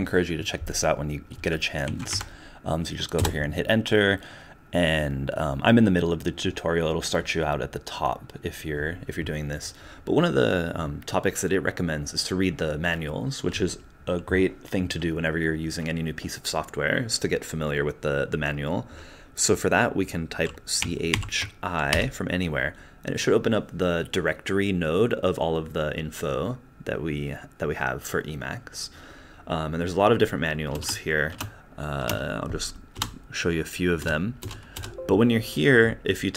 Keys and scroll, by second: 1.8 Down, 2.1 Up, 3.2 Return, 30.7 space, 31.3 space, 32.0 space, 32.9 BackSpace, 34.0 BackSpace, 34.4 BackSpace, 34.7 BackSpace.